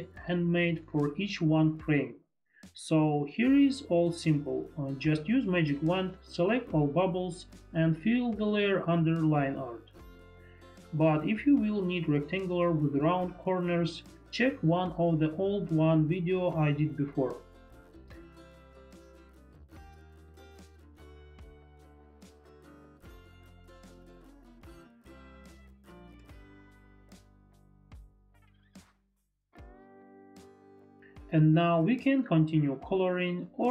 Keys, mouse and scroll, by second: 1.9 click, 4.1 click, 4.8 click, 6.4 click, 7.6 click, 11.3 shift+click, 13.9 click, 16.6 click, 18.2 ctrl+d, 18.2 ctrl+BackSpace, 18.2 click, 22.8 click, 27.2 click, 30.8 click, 32.4 click.